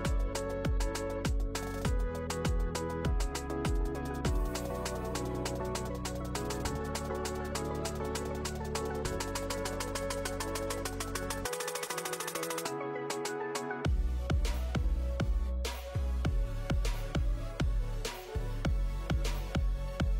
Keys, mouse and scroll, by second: 0.2 ctrl+s, 0.5 click, 1.8 click, 14.2 middle click.